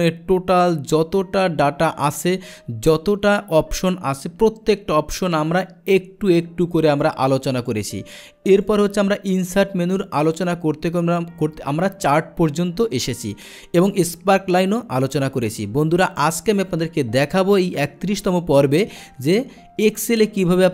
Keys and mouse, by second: 6.9 click, 7.6 click, 8.5 click.